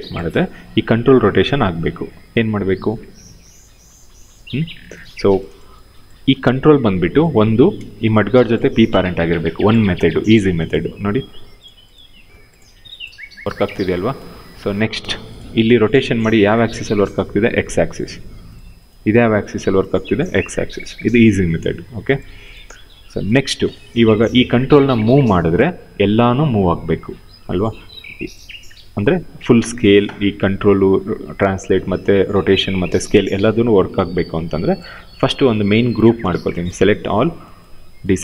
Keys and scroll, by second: 0.0 ctrl+z, 4.0 ctrl+z, 7.0 w, 9.0 p, 11.9 e, 13.4 ctrl+z, 15.4 e, 17.0 ctrl+z, 20.4 ctrl+z, 24.0 w, 25.4 ctrl+z.